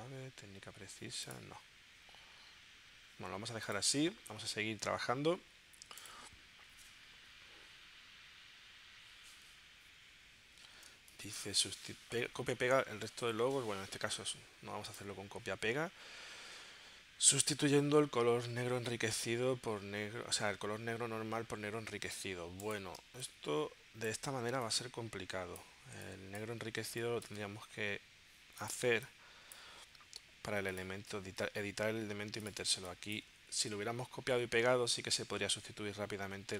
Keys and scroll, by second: 10.9 space, 23.1 space, 26.9 space, 28.9 space, 32.8 space.